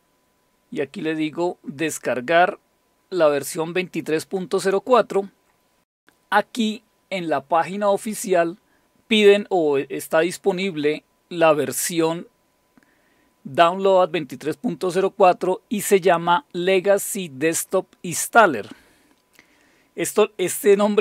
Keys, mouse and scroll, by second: 1.5-3.9 scroll down 3.